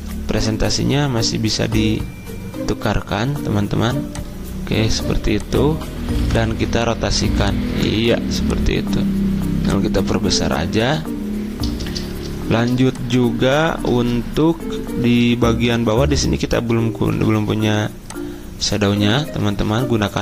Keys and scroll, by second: 6.2 r, 7.7 v, 19.4 ctrl+z.